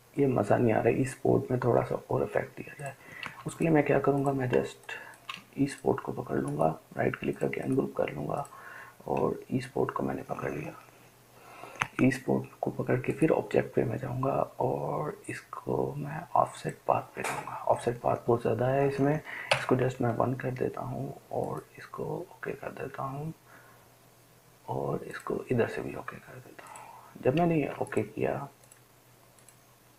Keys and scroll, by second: 3.7 ctrl+space, 4.2-9.6 ctrl+space, 19.8 1.